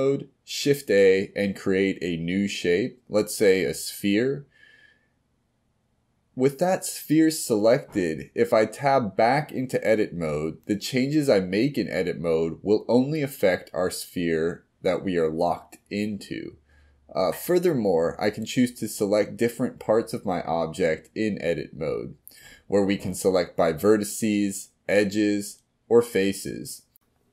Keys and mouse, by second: 4.9-6.3 middle drag, 7.5 g, 9.1-10.0 middle drag, 10.6-11.4 middle drag, 14.7-16.6 drag, 20.3 s, 22.6 g, 23.6 g.